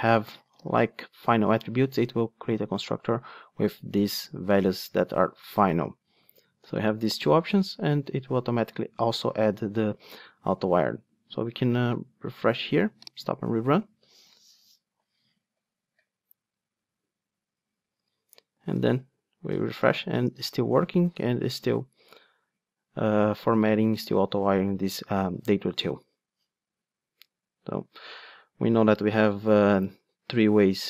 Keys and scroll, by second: 11.8 ctrl+r.